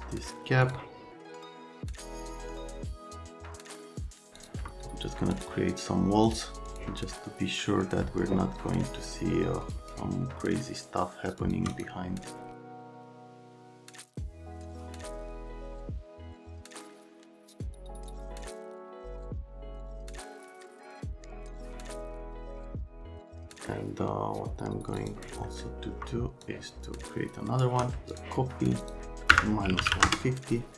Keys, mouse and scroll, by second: 0.6 click, 1.2 click, 1.3 click, 1.7 click, 2.1 click, 2.2 middle click, 2.7 click, 2.8 F3, 3.4 alt+q, 15.4 middle click, 15.9 alt+q, 16.0 middle click, 16.2 click, 16.3 click, 16.5 click, 16.8 alt+middle click, 17.1 scroll down 1, 17.4-18.2 scroll up 5, 18.3 right click, 18.6-21.2 typing, 18.7 click, 19.2 click, 19.5 click, 19.6 click, 21.0 click, 22.0 right click, 22.3 click, 22.5 KP_3, 22.6 KP_3, 22.7 KP_0, 22.8 KP_0, 23.2 click, 23.5 right click, 25.0 click, 25.4 right click, 29.3 KP_Subtract, 29.7 KP_1, 29.8 KP_5, 29.9 KP_0, 30.0 KP_Enter.